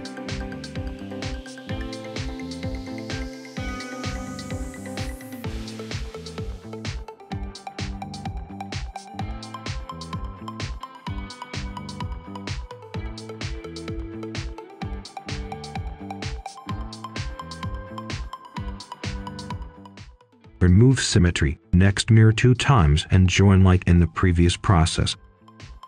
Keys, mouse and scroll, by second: 0.4 click, 0.9-1.5 scroll up 1, 1.5 right click, 2.9 click, 3.9 right click, 4.4-7.0 ctrl+shift+drag, 7.0 right click, 7.5 scroll down 1, 7.6 scroll up 1, 7.7 right click, 9.2-10.9 drag, 10.9 right click, 11.9 click, 12.2-12.6 scroll down 1, 12.6 right click, 14.3 click, 14.8 scroll down 1, 15.0 right click, 15.4-16.4 scroll up 1, 16.4 click, 17.5-18.0 scroll up 1, 18.0 click, 19.7-21.7 typing, 22.5 click, 23.3 typing, 23.7 Return, 24.4-25.6 scroll up 1, 25.6 click.